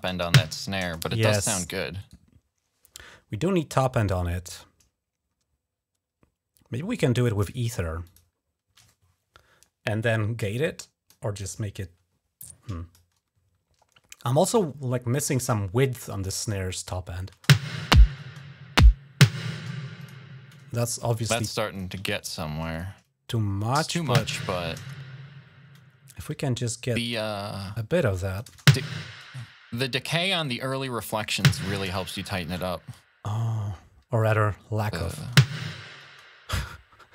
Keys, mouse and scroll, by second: 1.0 click, 1.8 right click, 7.8 click, 8.1 click, 10.4 click, 11.3-12.8 drag, 17.1 space, 18.0 space, 18.5 click, 19.3 space, 19.8 click, 20.9 click, 21.5 click, 21.8 shift+click, 22.5 click, 23.3 click, 24.3 click, 24.6 space, 26.8 click, 27.6 click, 28.2 space, 29.0 space, 30.2-31.3 drag, 31.0-31.6 typing, 34.0 click, 35.1 space, 35.8 space.